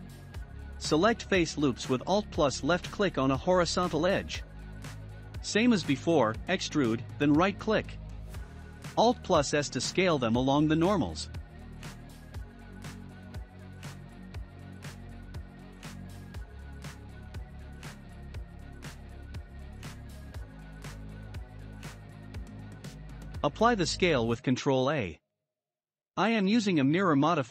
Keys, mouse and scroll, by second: 0.6-2.4 drag, 2.4 middle click, 2.8-4.5 scroll up 1, 4.5 e, 7.4 alt+s, 16.6-19.9 shift+middle drag, 19.9 Tab, 21.0-21.8 drag, 23.4 ctrl+a, 25.1 click.